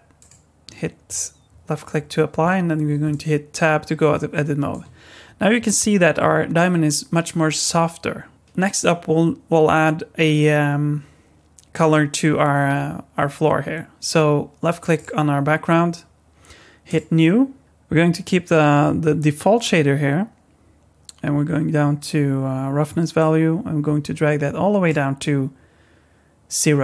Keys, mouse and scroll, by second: 2.4 Tab, 3.1 middle click, 8.3 middle click, 8.3 scroll down 3, 14.9 click, 16.9 click, 23.2 click.